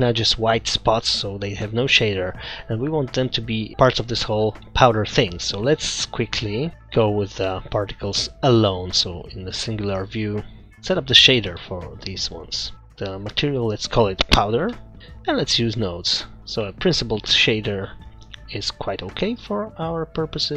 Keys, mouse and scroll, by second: 6.7 click, 6.7 scroll down 4, 7.0 KP_Divide, 7.9 middle click, 8.1-8.5 scroll up 2, 8.8 scroll down 2, 9.1 middle click, 9.5-10.1 scroll up 2, 10.1 middle click, 10.6-12.2 scroll up 5, 12.7 click, 12.7-13.6 scroll up 1, 13.6 click, 15.1 click, 16.2-16.6 scroll down 5, 16.6 middle click, 17.2-17.5 scroll down 2, 17.5 middle click, 20.2 click.